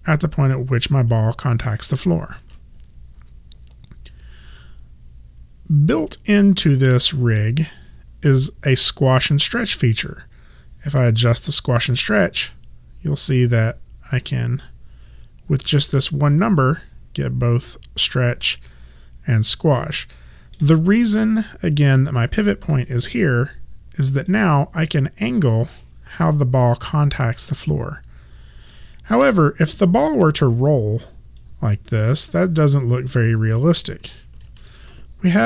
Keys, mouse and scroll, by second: 2.4 ctrl+z, 9.5 click, 11.3 middle click, 22.1 e, 24.3 click, 31.4 click, 34.5 ctrl+z.